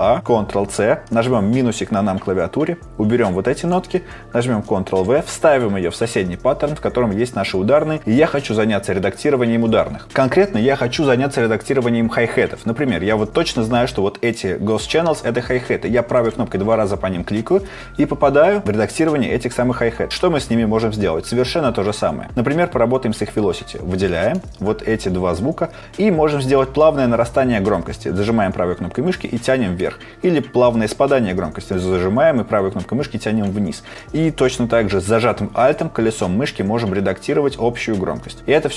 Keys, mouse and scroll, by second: 0.4 ctrl+c, 1.1 KP_Subtract, 3.3 right click, 5.3 right click, 13.5 ctrl+click, 16.1 right click, 27.7 right click, 31.7 right click.